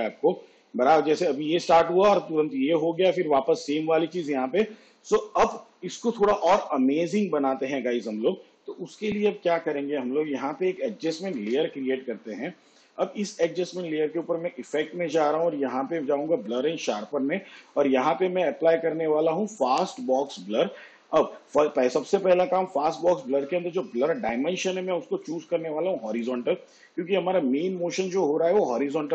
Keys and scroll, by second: 5.5 space, 11.3 ctrl+alt+y.